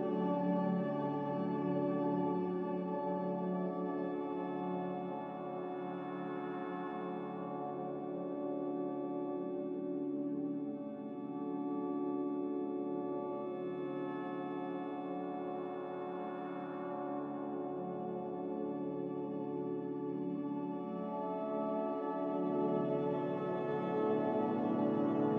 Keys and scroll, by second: 2.2 x, 4.3 z, 5.0 Delete, 7.7 ctrl+z, 9.3 g, 9.7 z, 13.5 a, 14.0 Delete, 14.9 z, 17.6 Escape, 18.0 c, 22.4 v.